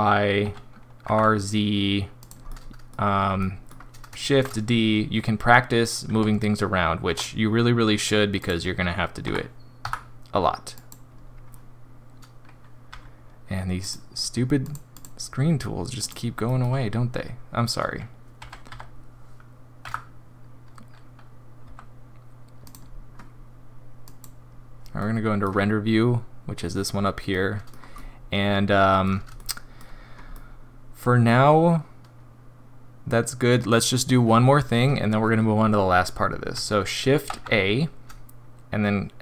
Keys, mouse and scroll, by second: 16.4 middle click, 18.5 g, 24.1 click, 25.0 middle click, 27.3 middle click, 27.9 middle click, 29.4 shift+middle click, 29.9 scroll up 2, 30.3 middle click, 33.5 scroll down 2, 37.2 shift+a.